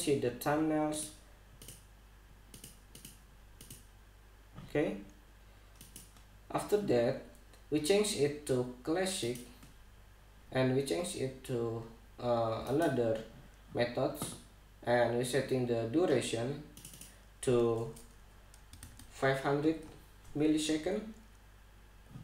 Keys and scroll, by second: 19.3 5, 19.6 0, 20.2 Return.